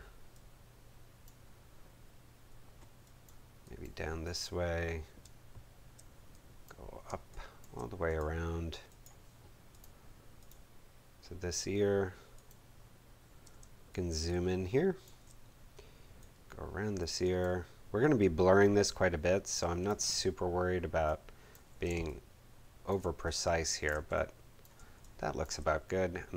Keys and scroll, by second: 5.2 space, 7.0 space, 13.4 space, 21.8 space.